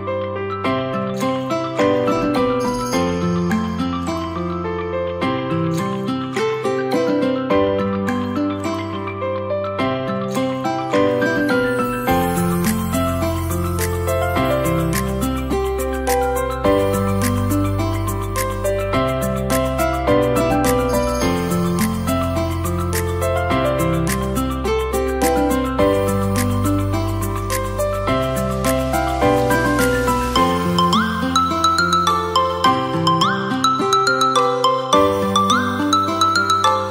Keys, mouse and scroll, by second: 1.4 Tab, 1.6-2.2 scroll down 3, 2.2 click, 2.5-4.5 middle drag, 4.5 click, 5.5-7.6 middle drag, 7.6-9.2 drag, 10.4-11.8 drag, 11.8 middle click, 12.5 click, 12.9-13.2 scroll down 3, 13.2-14.5 middle drag, 14.5-16.3 drag, 16.3-16.8 middle drag, 16.8-17.6 scroll up 3, 17.6-19.3 middle drag, 19.3-20.9 scroll down 1, 20.9 shift+a, 29.1 drag, 30.1 Tab, 30.4-30.9 scroll down 2, 30.9 s, 32.0-32.4 drag, 33.0 shift+middle click, 33.4 KP_1, 34.0-34.4 scroll up 6, 34.4-36.4 shift+middle drag, 36.4 click.